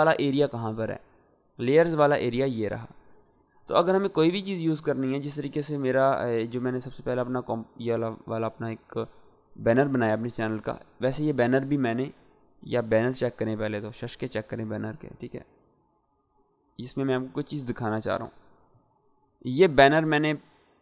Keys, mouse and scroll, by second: 1.5-2.7 drag, 3.5-4.4 scroll down 2, 4.4-6.5 scroll down 1, 7.3 click, 11.3-12.9 drag, 13.7 s, 15.3-16.8 ctrl+drag.